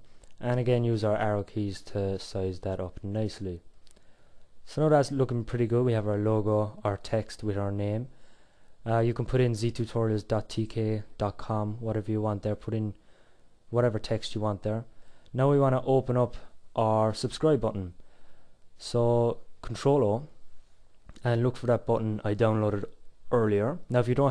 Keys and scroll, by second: 16.9 ctrl+o.